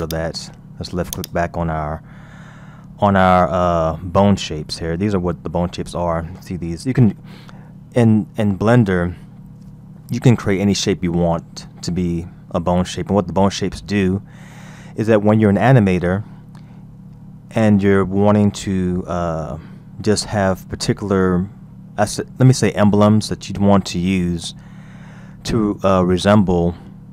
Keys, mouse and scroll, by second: 0.1 click, 1.1 click, 5.2 KP_1, 6.2-9.2 scroll up 1, 13.7-16.6 scroll up 3, 16.6-19.6 scroll down 1, 20.4-23.3 scroll down 3, 23.3-25.9 scroll up 3, 26.4 scroll down 2.